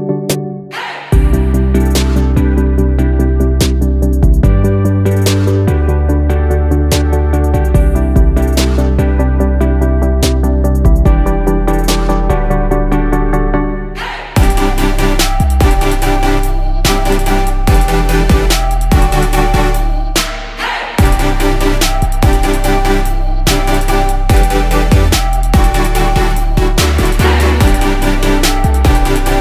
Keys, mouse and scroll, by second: 1.1-3.9 typing, 5.0 shift+click, 6.0 click, 7.0-9.3 typing, 10.9 click, 16.2 shift+click, 16.9-18.5 drag, 23.8 click, 27.4 click.